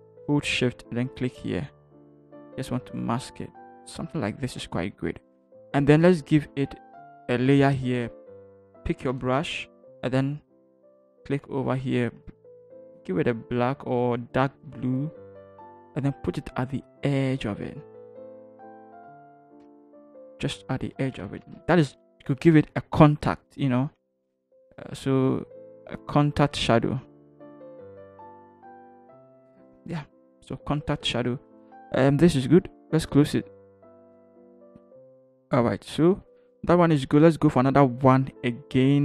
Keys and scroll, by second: 11.6 ctrl+t, 19.8 Return, 20.3 Down, 20.5 Down, 20.7 Down, 20.9 Down, 21.1 Down, 21.4 v, 21.6 Down, 21.9 Down, 22.5 Down, 23.6 Down, 23.8 Down, 24.0 Down, 24.2 Down, 24.9 t, 27.5 Return, 28.1 Down, 28.2 Down, 28.4 Down, 30.3 ctrl+0.